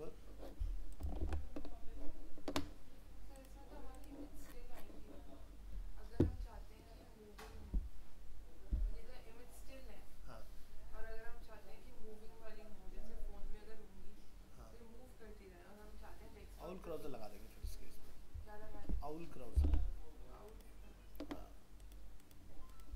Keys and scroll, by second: 1.2 ctrl+w, 19.6 alt+Tab.